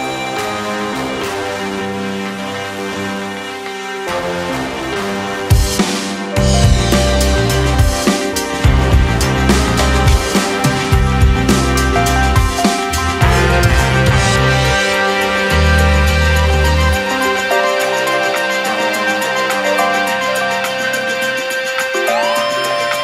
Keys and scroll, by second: 10.3 ctrl+KP_0.